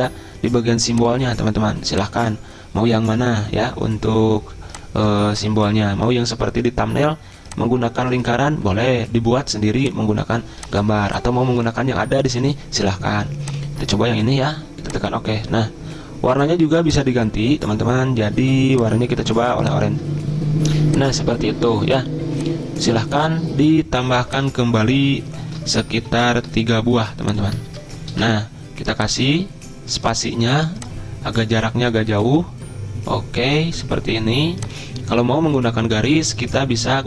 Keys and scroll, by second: 25.4 ctrl+c, 26.4 ctrl+x, 27.7 Return, 28.1 ctrl+v.